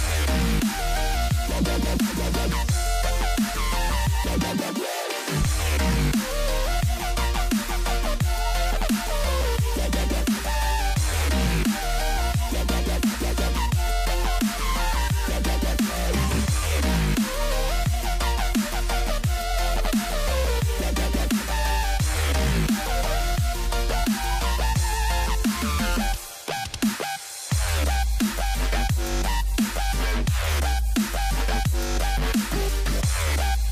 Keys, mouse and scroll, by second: 0.0 scroll up 1, 0.2 Tab, 0.6 ctrl+r, 1.1 ctrl+r, 2.0-4.0 typing, 5.4-7.1 typing, 8.8 a, 8.8 a, 9.1 c, 11.0 a, 11.1 a, 12.3 ctrl+r, 12.9 a, 13.1 a, 13.2 c, 13.7 g, 15.3 Tab, 15.7 scroll down 2, 16.0-17.0 scroll up 2, 17.0 scroll down 1, 17.1 middle click, 17.9 click, 18.5 z, 19.0 click, 19.1-19.7 right drag, 19.7 click, 19.9 middle click, 20.1 s, 21.8-23.4 middle drag, 23.5 click, 24.5 click, 25.0 q, 25.1 q, 25.8 right click, 26.0 click, 26.5-27.6 drag, 27.6 q, 27.7 q, 28.3 click, 28.7-30.0 drag, 30.8 Delete, 31.6 middle click, 32.3 a, 32.5 a, 32.6 middle click, 32.8 ctrl+s, 32.9 click, 33.3 Tab, 33.4 scroll up 2, 33.6 middle click.